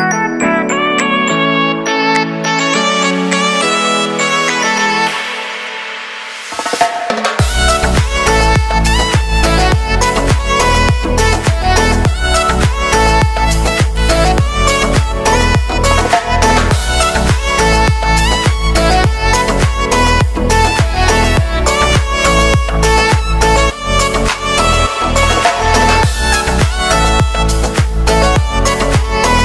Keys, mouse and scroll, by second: 0.3 click, 3.1 p, 4.0-5.8 drag, 9.4-14.1 drag, 14.1 space, 16.5 space, 18.0-19.5 drag, 19.8 ctrl+s, 19.9 click, 20.5-21.6 typing, 21.8 Return, 23.4 Return, 24.1-24.9 scroll up 1, 24.9 click, 25.2 ctrl+a, 25.7 click, 26.0 ctrl+a, 28.3-29.4 typing.